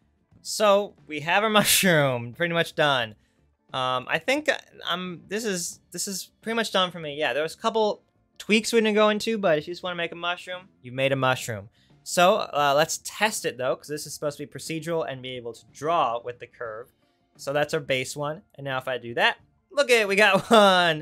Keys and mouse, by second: 16.3 Tab.